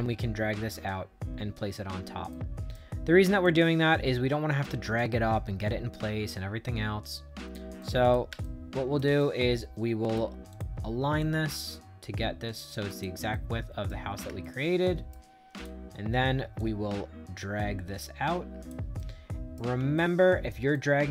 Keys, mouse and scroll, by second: 2.2 right click, 3.3-7.4 drag, 7.7 right click, 8.3 shift+right click, 9.1 right click, 10.4 click, 11.1-12.5 drag, 12.8 click, 13.2 right click, 14.3 shift+right click, 15.4 click, 16.5-18.6 drag, 18.9 right click, 19.9 shift+right click, 20.6-21.1 right drag.